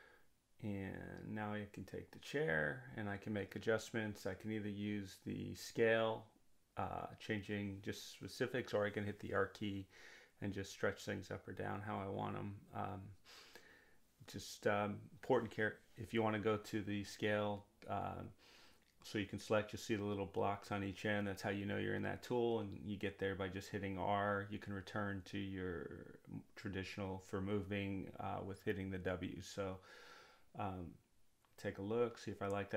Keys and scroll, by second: 9.4 r, 12.2 r.